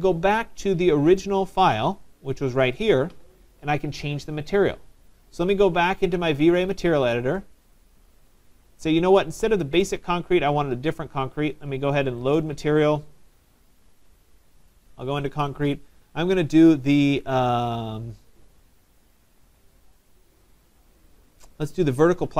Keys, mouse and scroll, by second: 0.0 click, 1.2 click, 2.9 click, 3.7 click, 6.7 click, 7.8 click, 9.9 right click, 12.4 click, 14.7 click, 21.7 click.